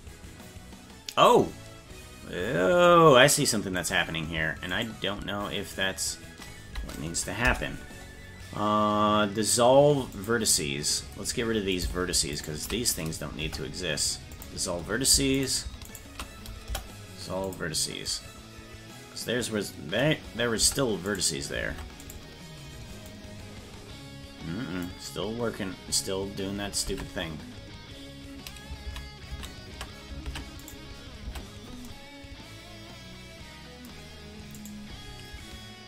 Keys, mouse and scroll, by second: 3.9 right click, 4.8 shift+right click, 7.5 Delete, 11.8 right click, 12.4 shift+right click, 13.5 Delete, 15.4 right click, 15.9 shift+right click, 16.7 Delete, 20.7 Tab, 21.2 right click, 21.8 ctrl+Tab, 22.3 right click, 23.3-25.0 drag, 27.0 ctrl+Tab, 29.0 ctrl+z, 29.5 ctrl+z, 30.3 ctrl+Tab, 30.8 right click, 31.3 Tab, 34.7 right click.